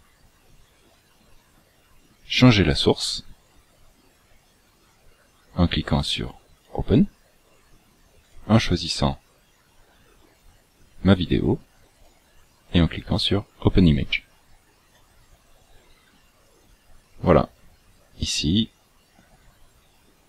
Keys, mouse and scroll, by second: 6.6 click, 12.1 click, 14.9 click.